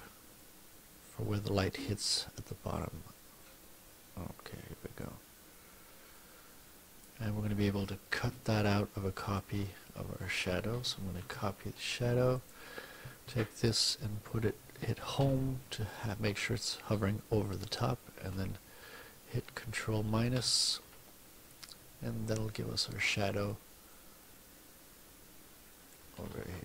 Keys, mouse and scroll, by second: 0.4-2.0 drag, 2.8-5.2 drag, 6.2 click, 8.2 F1, 9.2 click, 10.8 ctrl+c, 11.2 ctrl+alt+v, 12.4 click, 15.2 Home, 17.6 shift+click, 20.4 ctrl+-, 22.4 click, 23.5-26.1 drag, 26.3 ctrl+z.